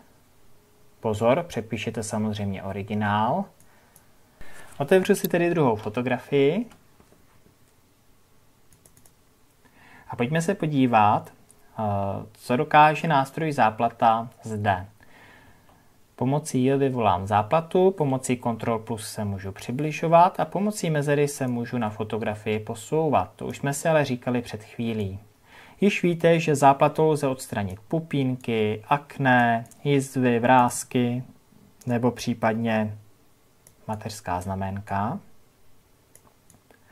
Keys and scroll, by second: 5.6 ctrl+o, 18.5 ctrl+KP_Add.